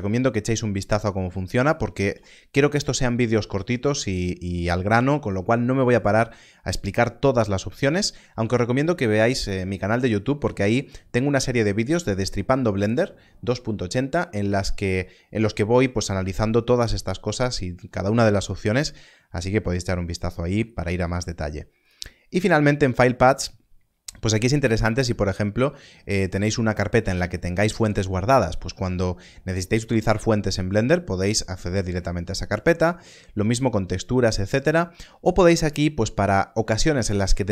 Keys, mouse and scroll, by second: 21.8 click.